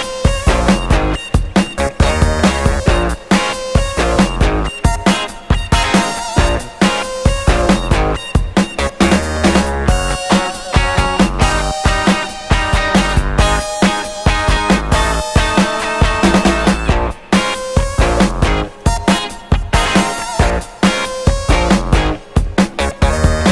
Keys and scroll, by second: 3.3 2, 4.2 BackSpace, 4.6 Return, 5.1 6, 5.2 Return, 9.1 d, 9.8 4, 9.9 Return, 10.8 Return.